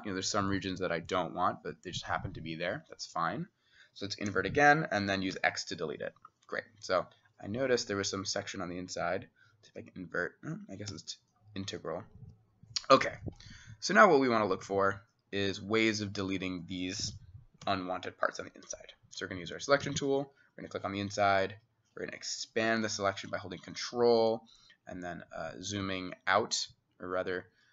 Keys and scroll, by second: 4.3 i, 5.3 x, 9.7 i, 10.9 i, 12.2 Escape, 17.7 s, 18.7-19.6 [, 19.9-25.8 [.